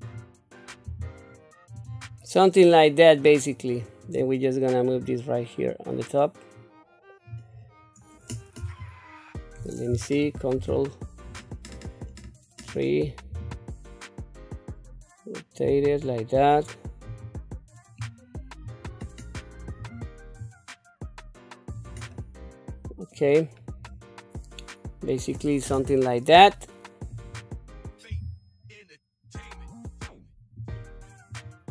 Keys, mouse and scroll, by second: 0.0 click, 0.8 g, 2.2 middle click, 4.0 click, 5.0-7.3 drag, 8.6 KP_3, 10.5 ctrl+KP_3, 13.3 r, 17.1 click, 18.0 click, 19.8 click, 20.4-21.7 drag, 22.1-23.1 middle drag, 23.4 scroll down 1, 23.9-25.3 middle drag, 25.7 KP_7, 27.1 click, 28.1 g, 31.3 click.